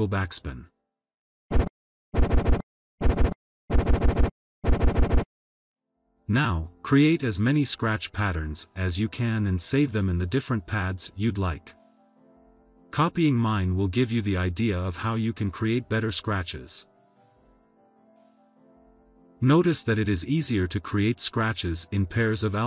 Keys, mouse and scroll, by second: 0.6 click, 1.4 click, 2.0 click, 2.9 click, 10.6 click, 11.5 BackSpace, 16.5 click, 17.0 click, 17.3 click, 17.8 click, 18.2 click, 18.8 click, 19.1 click, 19.6 click, 19.9 click.